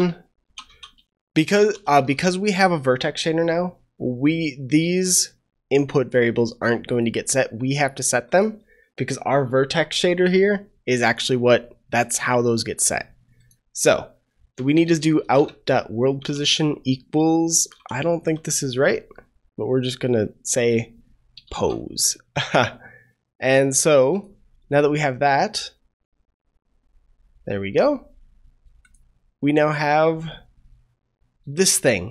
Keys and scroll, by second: 21.4 ctrl+s.